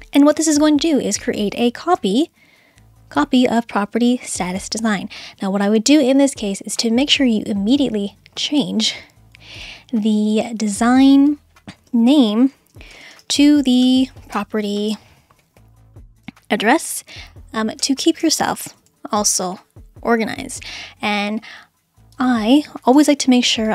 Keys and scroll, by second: 11.9-14.8 typing, 16.0-19.9 typing, 23.0 d.